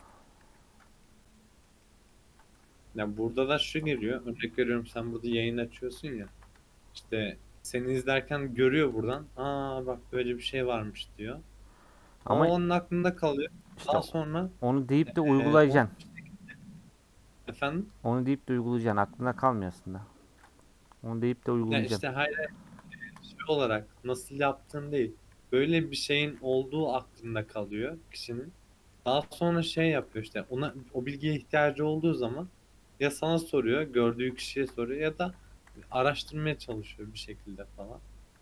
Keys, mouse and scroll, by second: 0.4 /, 0.8 Tab, 1.0-2.6 middle drag, 2.6 Tab, 5.5 click, 5.8 ctrl+a, 6.3 ctrl+a, 7.0 middle click, 7.2 Tab, 7.5 middle click, 8.1 alt+click, 9.6 middle click, 10.3 alt+click, 10.8-13.1 middle drag, 13.1 alt+click, 13.7 a, 14.4 u, 15.5-18.3 middle drag, 18.3-18.8 scroll down 1, 18.8 Tab, 19.4-23.0 right drag, 23.0-23.4 drag, 23.4-24.4 middle drag, 24.4-25.4 scroll down 3, 25.4 /, 26.0 scroll down 2, 26.3 scroll up 2, 26.4-27.5 middle drag, 27.5 scroll up 2, 27.8 Tab, 28.3-29.6 middle drag, 29.6 ctrl+t, 30.5 alt+j, 31.0 Tab, 31.3 middle click, 31.8 Tab, 32.5-33.8 middle drag, 33.8-34.5 scroll up 2, 34.5 shift+middle click, 34.8 1, 35.3 click, 35.8 g, 36.6 a, 37.8 m.